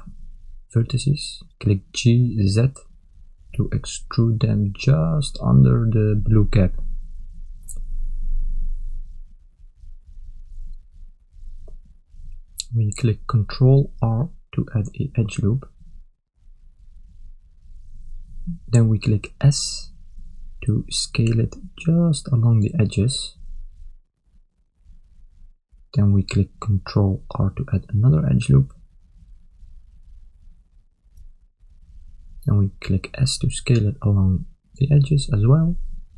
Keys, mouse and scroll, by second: 2.4 g, 11.4 a, 13.3 ctrl+r, 20.1 s, 26.2 a, 28.5 ctrl+r, 32.9 s.